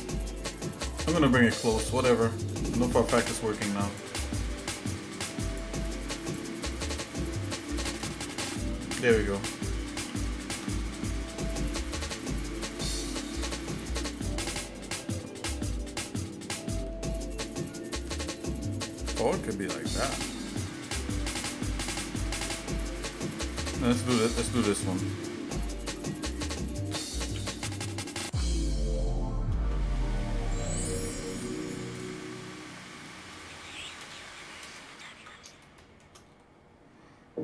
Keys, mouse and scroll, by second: 1.2 ctrl+r, 1.5 click, 2.6 shift+middle click, 3.9 click, 5.6 click, 6.4 click, 7.5 ctrl+KP_Add, 7.8 ctrl+KP_Add, 8.2 ctrl+KP_Add, 10.0 s, 25.4 shift+middle click, 26.9 g, 28.7 shift+middle click, 30.2 shift+middle click, 30.9 shift+middle click, 32.0 click, 33.1 shift+middle click, 34.1 ctrl+KP_Add, 34.8 ctrl+KP_Add, 35.6 shift+middle click, 36.3 scroll down 1.